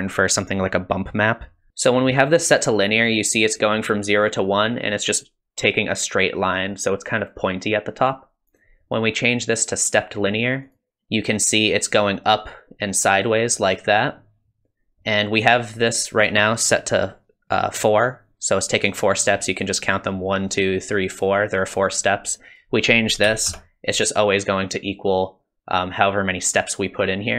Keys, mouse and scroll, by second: 8.5 click, 22.5 click.